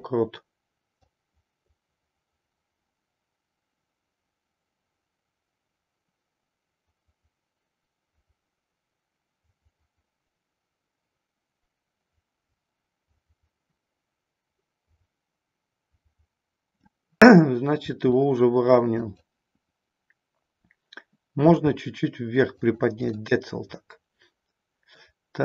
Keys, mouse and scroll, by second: 1.1-16.8 drag, 17.2 middle click, 17.7 r, 19.1 click, 21.5 g, 22.6 click, 23.1-25.0 middle drag, 25.0 scroll down 1.